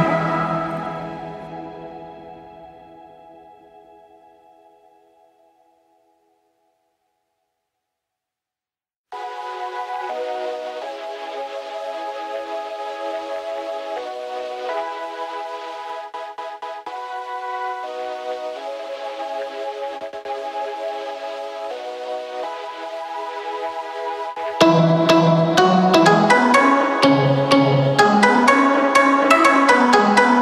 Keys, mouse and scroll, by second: 2.4 ctrl+i.